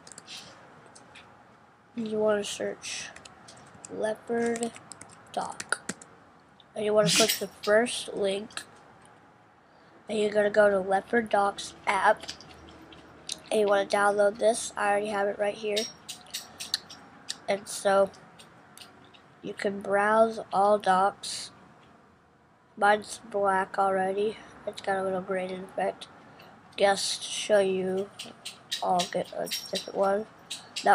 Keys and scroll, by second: 0.0-1.3 typing, 2.8-6.3 typing.